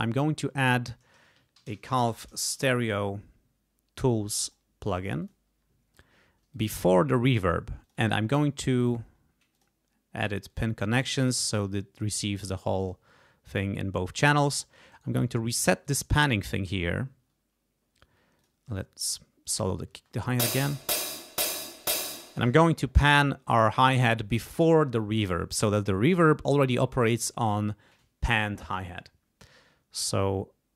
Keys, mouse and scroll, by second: 0.6 click, 1.3-3.1 typing, 4.3 click, 5.2 click, 6.5-7.5 drag, 7.8 click, 8.3 right click, 9.5 click, 10.5-11.6 drag, 12.8 click, 14.9 right click, 15.8 click, 18.4 click, 19.0 click, 19.9 space, 21.5 click, 22.4 space.